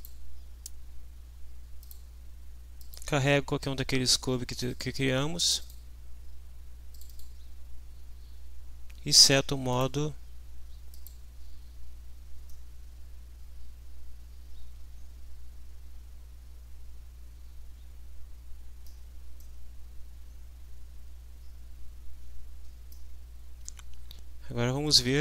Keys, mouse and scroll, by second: 1.8 click, 2.8 click, 4.5 click, 5.4 click, 6.9 click, 9.7 click, 11.0 click, 12.5-15.7 middle drag, 15.7-19.0 drag, 19.4-23.1 drag.